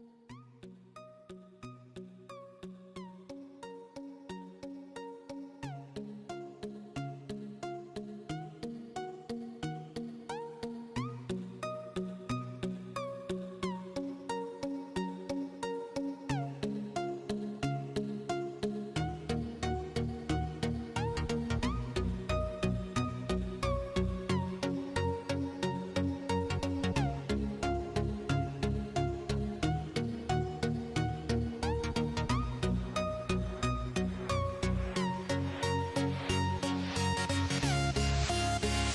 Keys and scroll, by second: 0.0-0.6 typing, 3.4-5.9 typing, 7.2-8.1 typing, 9.2-10.1 typing, 12.0-16.6 typing, 17.7-18.6 typing, 21.2-24.7 typing, 26.1-28.1 typing, 29.8-33.6 typing, 35.6-36.6 typing, 38.3-38.9 typing.